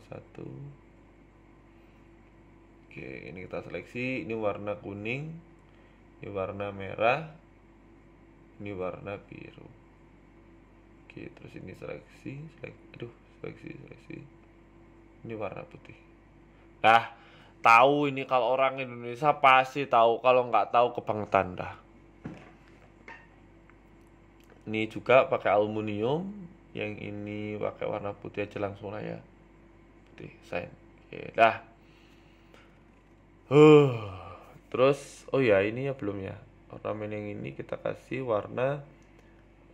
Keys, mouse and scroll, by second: 0.5 click, 1.3 alt+shift+right click, 3.2 click, 3.2 a, 3.3 a, 3.8 alt+shift+right click, 4.4 click, 5.0 click, 6.2 a, 6.3 a, 6.7 alt+shift+right click, 8.2 click, 8.6 alt+shift+Right, 8.6 click, 9.1-10.1 scroll down 1, 10.1 a, 10.2 a, 10.4 alt+shift+Right, 11.2 ctrl+z, 11.6 alt+shift+Right, 12.9 shift+right click, 13.5 click, 14.0 click, 14.2 scroll down 3, 14.2 scroll up 1, 14.3 Tab, 14.6 shift+middle click, 14.8 Tab, 15.0-15.5 scroll down 2, 15.4 click, 16.0 shift+middle click, 16.5 g, 19.3 Tab, 19.5-20.1 scroll down 7, 19.6 middle click, 20.1 middle click, 20.3-20.8 scroll up 4, 20.5 shift+middle click, 20.9 right click, 21.3 middle click, 22.1 click, 23.4 middle click, 23.9 Tab, 24.3 click, 26.1 click, 28.5 click, 28.8 middle click, 29.5 KP_1, 30.0-30.8 scroll down 7, 30.1 Tab, 30.9-31.7 scroll up 6, 31.3 shift+middle click, 32.1 right click, 32.4 middle click, 32.7 scroll down 3, 32.9 Tab, 33.1 middle click, 33.4 scroll down 1, 33.7 KP_1, 34.5 shift+middle click, 35.3 a, 35.4 a, 36.4 l, 38.0 click, 38.3 click.